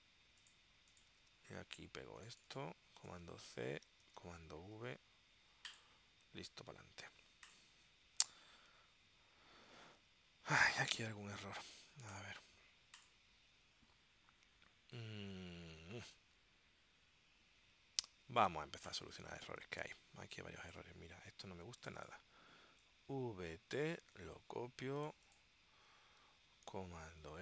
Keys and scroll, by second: 1.3 super+Tab, 3.0 super+c, 4.2 super+v, 18.2 super+s, 19.9 space, 24.1 super+c, 27.1 super+f.